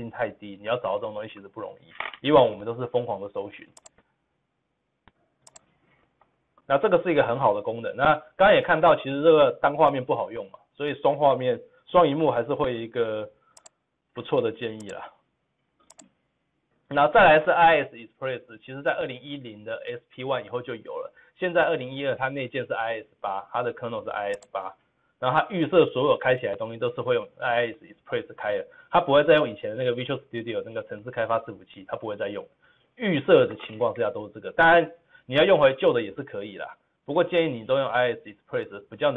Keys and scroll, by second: 6.1 ctrl+v, 6.1 ctrl+z.